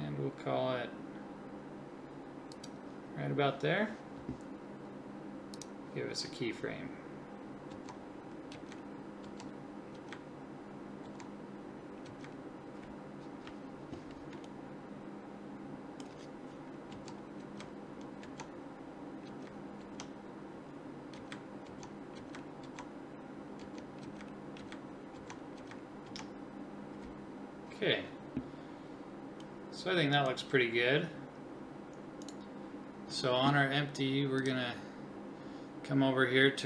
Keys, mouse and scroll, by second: 5.5 click, 7.7 Left, 8.5 Right, 9.2 Left, 10.0 Right, 11.1 Left, 12.1 Right, 16.9 Left, 17.4 Right, 18.2 Left, 19.3 Right, 19.8 Left, 21.2 Right, 21.7 Left, 22.2 Right, 22.7 Left, 23.6 Left, 24.0 Right, 24.6 Right, 25.2 Left, 25.6 Right, 26.1 Left, 34.4-36.0 drag.